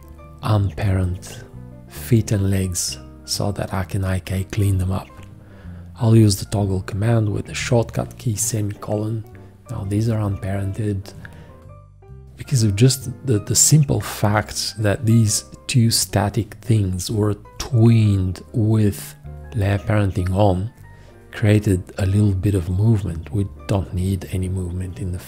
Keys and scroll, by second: 7.5 i.